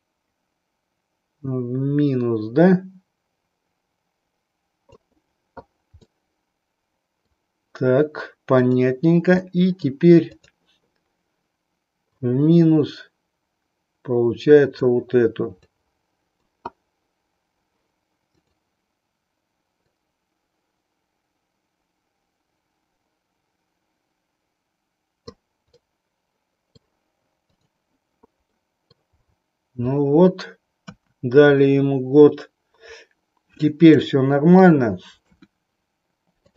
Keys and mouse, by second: 6.0-7.4 middle drag, 8.5 click, 9.4 middle click, 12.1-14.9 drag, 15.5 click, 18.3-19.4 drag, 19.8-25.3 drag, 25.8-26.9 middle drag, 27.4 click, 28.5 middle click, 30.8 KP_1, 33.9 shift+middle click, 35.1 KP_1, 36.4 click.